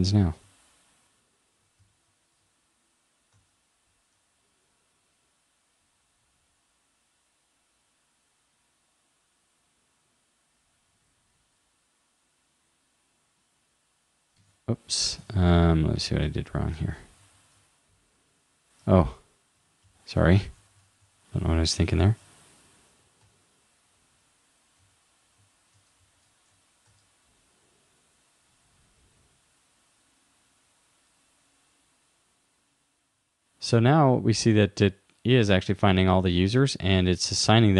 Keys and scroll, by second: 0.3 shift+super+Left, 1.9 alt+super+Left, 3.5 super+r, 14.5 super+Tab, 15.3 super+Tab, 16.1 super+w, 17.4 alt+super+Right, 18.9 super+Right, 20.5 shift+u, 22.1 super+s, 23.2 super+r, 24.8 super+w, 26.1 alt+super+Left, 26.9 super+r.